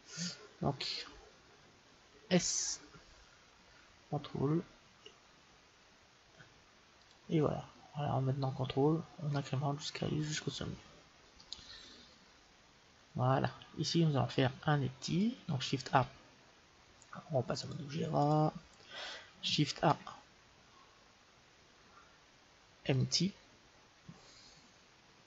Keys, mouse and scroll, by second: 2.2 s, 7.6-9.2 scroll up 1, 9.2-10.2 scroll up 1, 10.2 middle click, 10.4-10.8 scroll down 1, 10.8-13.2 middle drag, 15.8 shift+a, 18.2-19.5 drag, 19.7 shift+a.